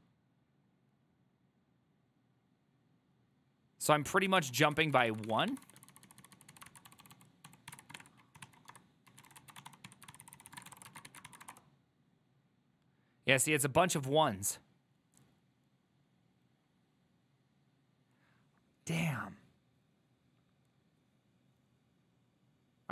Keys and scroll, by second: 0.0-0.3 typing, 4.6 ctrl+c, 4.7-12.0 typing.